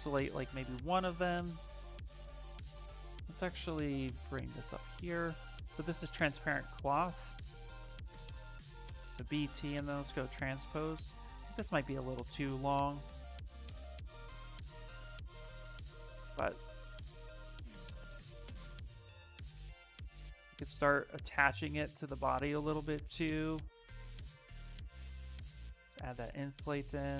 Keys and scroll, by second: 2.7 w, 7.0-9.3 typing, 10.3 w, 14.2 s, 21.3 s, 25.6 b.